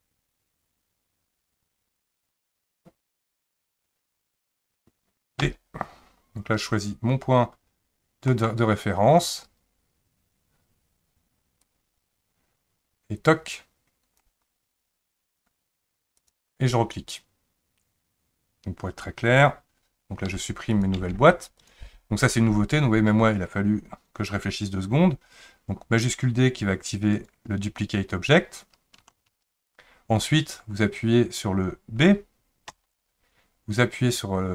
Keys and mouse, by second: 20.3 Delete, 21.0 Delete, 21.6 click, 27.1-28.2 right drag, 29.3 shift+d.